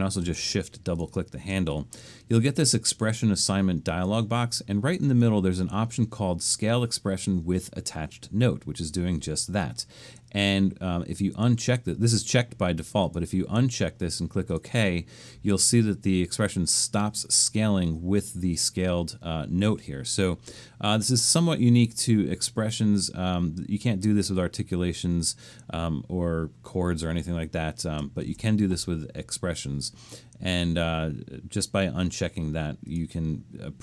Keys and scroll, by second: 28.2 shift+Return.